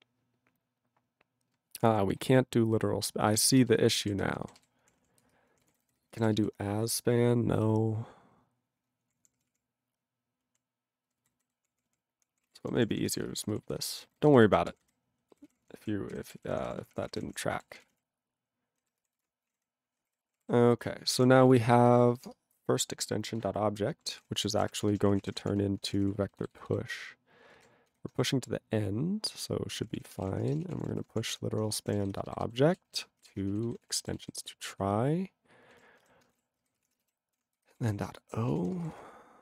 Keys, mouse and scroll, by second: 1.7 ctrl+p, 1.9 ctrl+p, 2.2 ctrl+p, 3.2 ctrl+b, 3.4 ctrl+space, 3.9 ctrl+alt+f, 4.1 ctrl+n, 4.3 ctrl+n, 4.6 ctrl+g, 4.8 ctrl+p, 5.0 ctrl+p, 5.2 ctrl+space, 5.5 ctrl+p, 5.6 ctrl+g, 5.7 ctrl+n, 5.8 ctrl+n, 6.1 ctrl+n, 6.2 ctrl+e, 6.3 ctrl+b, 9.1 ctrl+p, 9.2 ctrl+p, 9.3 ctrl+p, 9.5 ctrl+p, 10.4 ctrl+p, 11.1 ctrl+n, 11.2 ctrl+n, 11.5 ctrl+p, 11.7 ctrl+p, 12.0 ctrl+p, 12.1 ctrl+p, 12.4 ctrl+a, 12.5 ctrl+n, 12.6 ctrl+n, 12.7 ctrl+p, 12.9 ctrl+p, 13.0 ctrl+p, 13.1 ctrl+space, 13.2 ctrl+n, 13.3 ctrl+n, 13.6 ctrl+n, 13.8 ctrl+n, 14.0 ctrl+n, 14.2 ctrl+n, 14.3 ctrl+w, 14.4 ctrl+n, 14.5 ctrl+n, 14.7 ctrl+p, 14.8 ctrl+y, 15.3 ctrl+k, 15.5 ctrl+p, 15.6 ctrl+p, 15.8 ctrl+k, 16.2 ctrl+/, 16.2 ctrl+n, 16.4 ctrl+k, 16.5 ctrl+p, 16.6 ctrl+e, 16.6 ctrl+p, 16.8 ctrl+e, 16.9 ctrl+p, 17.0 ctrl+p, 17.2 ctrl+p, 17.3 ctrl+p, 17.8 ctrl+s, 17.9 ctrl+e, 19.5 ctrl+a, 19.6 ctrl+n, 20.1 ctrl+=, 20.9 ctrl+=, 21.1 ctrl+o, 21.1 Tab, 21.5-22.8 typing, 24.0-26.1 typing, 26.3 ctrl+b, 26.4 ctrl+b, 26.7 ctrl+b, 34.4 alt+/, 35.7 ctrl+a, 35.9 ctrl+space, 36.0 ctrl+n, 36.5 alt+w, 36.6 ctrl+y, 36.8 ctrl+p, 36.8 ctrl+e, 37.2 alt+b, 37.7 ctrl+f, 37.7 ctrl+d, 37.8 ctrl+d, 38.6 ctrl+n, 38.7 ctrl+space, 38.8 ctrl+n, 38.9 ctrl+n.